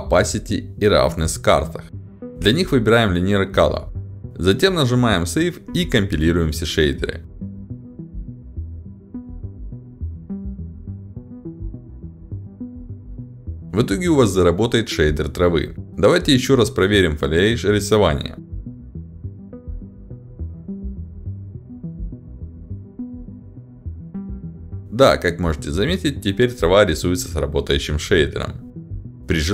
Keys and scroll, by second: 14.8 d, 15.4 w, 15.5 a, 17.3-19.2 typing, 22.5 ctrl+alt+d, 23.8 w, 23.9 a, 25.1 d, 26.3 s, 26.4 d, 26.5 a, 27.0 w, 28.4 [.